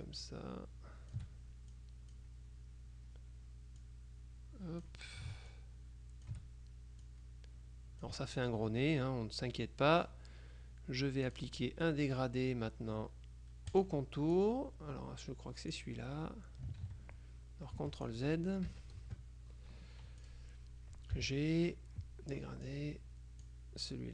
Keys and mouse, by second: 1.8 click, 3.9-5.5 drag, 5.6-6.9 ctrl+shift+drag, 7.1-9.0 drag, 11.4 click, 13.8 click, 16.9 ctrl+z, 17.9 F1, 18.1 click, 18.8 KP_Subtract, 19.5 KP_Add, 20.3 click, 21.3 g, 22.8-24.1 drag.